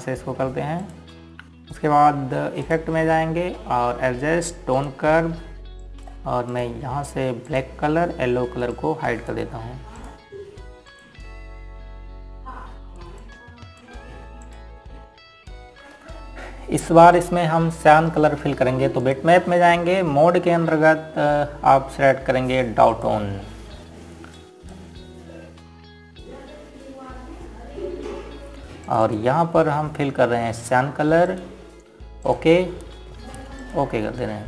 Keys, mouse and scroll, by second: 17.1 click, 24.6 click, 30.5 click.